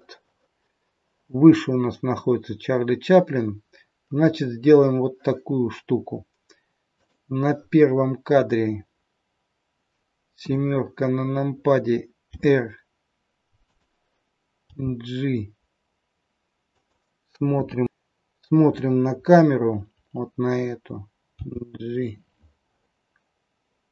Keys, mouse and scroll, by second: 7.8 click.